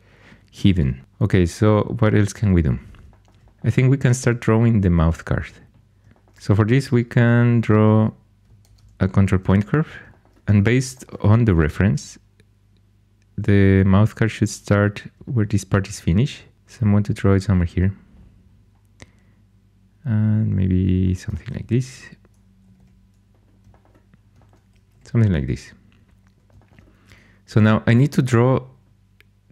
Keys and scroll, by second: 8.6 ctrl+super+c, 21.5 1, 22.6 typing, 24.8 2.